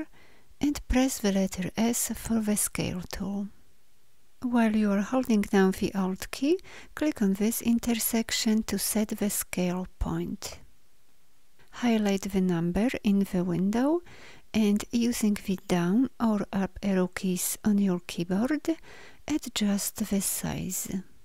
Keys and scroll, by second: 1.7 s, 15.2 Down, 16.1 Up.